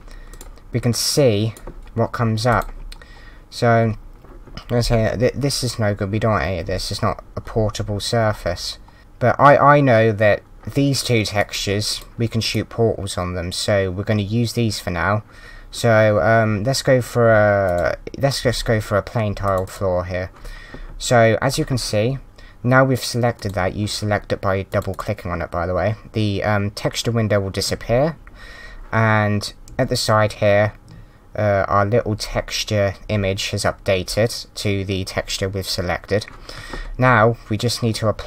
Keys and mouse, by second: 0.3 click, 2.5 click, 10.9 click, 17.6 click, 19.4 click, 24.4 click, 24.7 click.